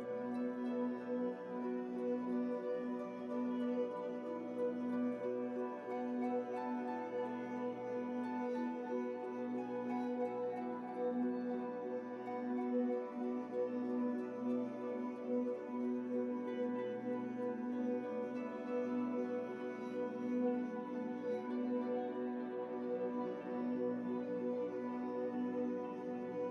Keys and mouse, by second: 0.0-16.5 typing, 0.6 alt+a, 1.2 click, 1.6 click, 1.6 Delete, 2.2 alt+a, 2.3 middle click, 2.5 click, 2.8 alt+a, 5.1 click, 5.4 alt+a, 5.5 click, 5.7 alt+a, 6.2 click, 6.8 alt+a, 6.8 middle click, 6.9-8.0 drag, 7.3 alt+a, 8.0 middle click, 8.1 alt+a, 8.2-9.6 drag, 8.6 alt+a, 9.2 alt+a, 9.6-11.0 middle drag, 11.1 middle click, 12.8 alt+a, 12.9 click, 13.5-15.5 drag, 13.6 alt+a, 14.2 Tab, 14.8 Tab, 14.9 Tab, 15.4 alt+a, 15.5 Tab, 15.6 click, 16.1 Tab, 16.2 alt+a, 16.3 middle click, 17.2-18.4 drag, 18.6 middle click, 18.8 Tab, 18.9 click, 19.0-26.5 typing, 19.5 Tab, 20.6 ctrl+z, 22.3 ctrl+z, 23.4-24.6 drag, 25.3 middle click, 26.0 Tab, 26.3 click.